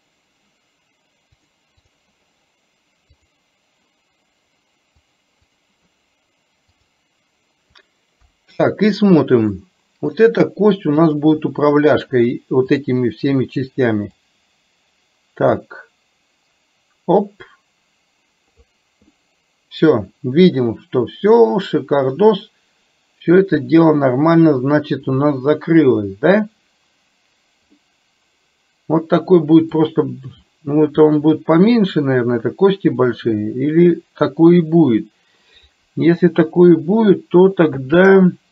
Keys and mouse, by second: 1.9 click, 3.3 click, 5.2 click, 6.9 click, 8.3 KP_1, 9.5-10.2 middle drag, 11.3 click, 12.8 click, 14.3-18.7 drag, 19.3-24.4 middle drag, 27.8-29.9 middle drag.